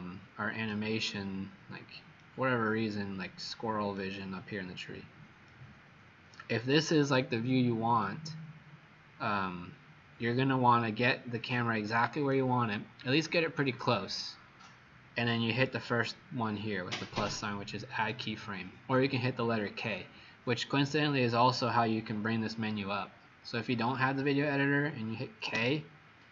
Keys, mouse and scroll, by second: 1.3 scroll down 3, 2.1 right click, 4.5-5.4 scroll up 1, 5.4 right click, 8.0 click, 25.5 k.